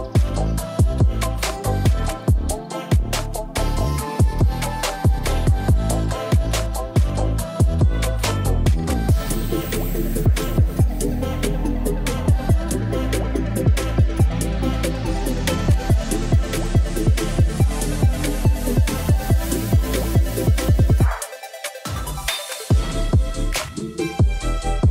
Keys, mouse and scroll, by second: 0.3-0.7 drag, 2.5-3.7 drag, 9.9 ctrl+s, 11.9 click, 13.0-13.4 drag, 13.8 click, 14.4-18.1 drag.